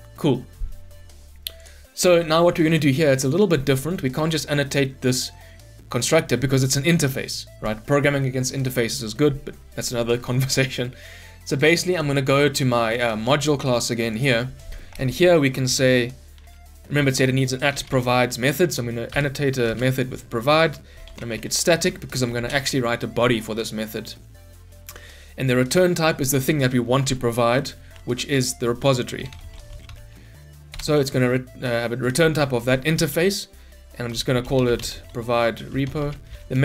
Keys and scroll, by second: 5.3 ctrl+b, 19.1 Return, 30.7 Return.